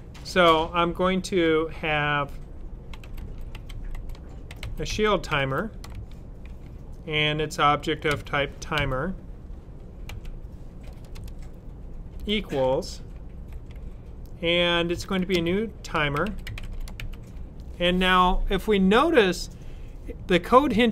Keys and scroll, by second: 2.6-5.9 typing, 8.0-8.7 typing, 10.0-12.0 typing, 14.6-17.4 typing.